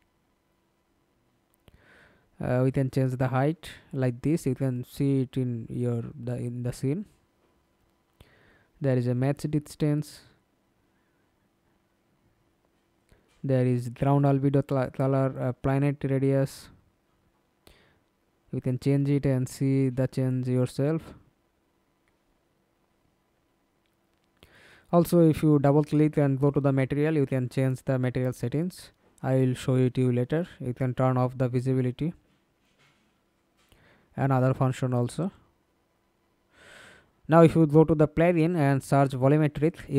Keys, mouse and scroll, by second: 11.4-12.1 scroll down 1, 12.1-16.4 scroll down 1, 16.4-17.4 scroll down 1, 22.9-23.6 scroll down 4, 23.6-26.5 scroll down 2, 26.5-27.1 scroll down 2, 27.2-28.1 scroll down 1, 28.1-28.6 scroll down 1, 28.6-30.8 scroll down 2, 30.8 double click, 32.3-36.0 scroll down 5, 38.7-39.9 typing.